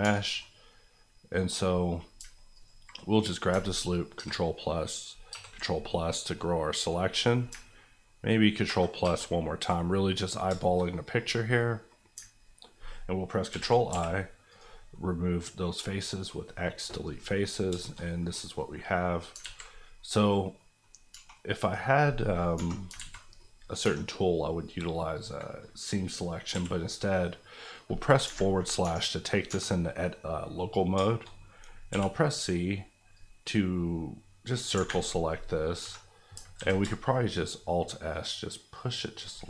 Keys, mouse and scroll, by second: 0.0 3, 0.2 middle click, 0.4-1.7 scroll up 1, 1.7 middle click, 2.0-2.5 scroll up 2, 2.5 alt+click, 4.6 ctrl+KP_Add, 5.6 KP_Add, 6.0 scroll down 1, 6.4 middle click, 8.6 ctrl+KP_Enter, 9.0 ctrl+KP_Add, 9.9 scroll down 1, 10.4 shift+scroll down 1, 10.6 shift+middle click, 11.2 scroll up 1, 11.5 middle click, 13.5 i, 13.9 x, 14.5 click, 14.9 middle click, 15.9 middle click, 17.5 scroll up 2, 17.8 shift+middle click, 18.3 scroll up 1, 19.0 middle click, 19.4 alt+z, 19.9 middle click, 20.8 scroll up 1, 21.1 2, 21.5 click, 22.5 KP_Divide, 22.9 alt+z, 23.3 middle click, 23.8 3, 26.5 c, 26.8-28.0 scroll down 1, 28.0 scroll up 1, 28.2 Escape, 30.5 middle click, 31.9 c, 32.0-32.5 scroll down 1, 32.5-33.1 scroll up 1, 33.1 click, 34.7 Escape, 35.0 middle click, 35.8 KP_Divide, 36.3 alt+KP_Divide, 36.5 alt+s, 39.2 shift+click.